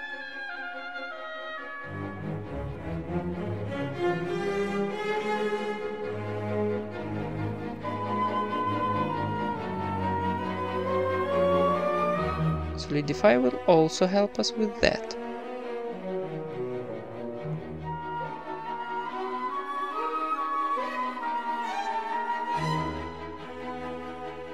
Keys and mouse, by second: 0.0-1.8 typing, 1.3-3.1 middle drag, 2.9 KP_1, 3.1 g, 4.0 s, 5.4-7.8 typing, 6.3 middle click, 7.3 right click, 9.1 s, 10.1 Tab, 10.3 ctrl+s, 10.3-12.8 drag, 10.3 z, 10.3 a, 10.7 Tab, 13.1-14.1 drag, 14.3 click, 15.7 KP_1, 16.3 z, 19.1 Tab, 19.8 middle click, 20.1 z, 20.4 ctrl+Tab, 20.7 right click, 21.1 ctrl+KP_Add, 21.8 e, 22.0 s, 23.9 e, 24.3 g.